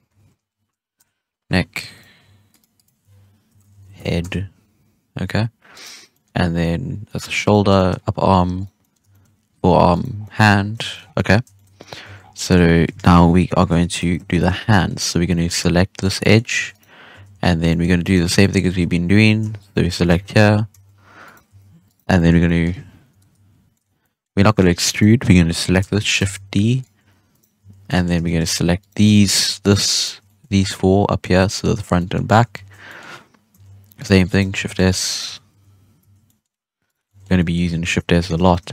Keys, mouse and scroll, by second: 1.9 right click, 2.4 click, 2.7-5.0 drag, 5.0 scroll down 1, 5.3-5.7 scroll up 1, 5.7 right click, 6.0-7.4 middle drag, 7.4 right click, 7.6-8.5 scroll down 4, 7.7 shift+middle drag, 8.5 right click, 8.7-9.2 middle drag, 9.2-9.9 scroll up 3, 9.9 right click, 10.1 scroll down 2, 10.2 middle drag, 10.4-10.8 scroll up 6, 10.8 shift+middle click, 10.9 scroll down 1, 11.1-12.0 middle drag, 12.0 a, 12.1 scroll down 3, 12.3 middle drag, 12.5-12.9 scroll up 1, 12.9 alt+a, 13.3 KP_1, 14.2-14.7 scroll up 3, 14.3 shift+middle drag, 14.7-15.1 middle drag, 15.1 scroll up 1, 15.3-15.9 middle drag, 15.9 right click, 16.1 scroll down 1, 16.1-16.5 middle drag, 16.5 Tab, 16.7 right click, 17.1 Tab, 17.3 z, 18.3-18.6 middle drag, 18.6 alt+a, 19.5 alt+shift+right click, 20.0 shift+s, 20.7 Tab, 21.2 right click, 21.4 Tab, 21.8 right click, 22.1-23.0 middle drag, 23.0 KP_3, 23.7 shift+middle drag, 23.8 scroll up 1, 23.9 middle drag, 24.2 scroll down 2, 24.4-24.8 shift+middle drag, 24.8 right click, 26.1 shift+d, 26.9 Tab, 27.2 right click, 27.5 Tab, 27.8-28.1 middle drag, 28.1 alt+a, 28.7 alt+shift+right click, 29.0-29.6 middle drag, 29.6 shift+right click, 29.9 shift+right click, 30.2 middle drag, 30.4 z, 30.6-31.2 middle drag, 31.2 scroll up 1, 31.3-32.2 middle drag, 32.2-32.5 scroll down 2, 32.5 shift+s, 32.8-33.5 middle drag, 33.5 Tab, 33.9 right click, 34.1 Tab, 34.2 right click, 34.5 shift+s, 35.0 right click, 35.3 shift+s, 35.9 Tab, 36.2-36.8 middle drag, 36.8 right click, 37.0-37.5 middle drag, 37.5 Tab, 37.8 alt+a, 38.1 1, 38.4 alt+shift+right click, 38.6 middle click.